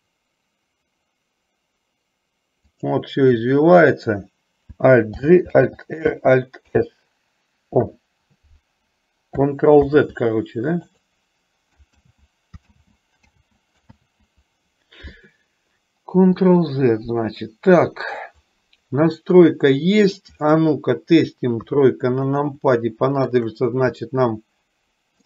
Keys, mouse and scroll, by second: 5.3 alt+g, 5.8 alt+r, 10.0 ctrl+z, 12.2 ctrl+z, 13.0 click, 13.4 ctrl+z, 17.5-18.4 middle drag, 19.3-20.4 middle drag, 21.7 KP_3, 23.0 middle click, 24.3-25.2 middle drag.